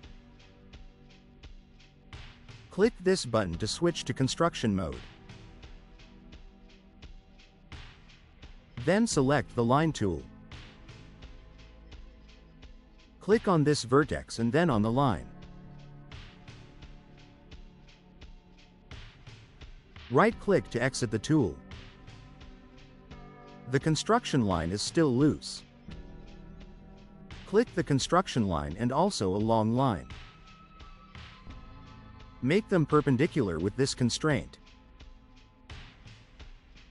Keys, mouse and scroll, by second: 6.3 click, 10.6 click, 12.0 middle click, 12.3 middle click, 12.5 middle click, 13.7 click, 18.2 click, 20.4 right click, 23.0-24.5 drag, 25.1 click, 26.0 click, 28.4 click, 34.2 click.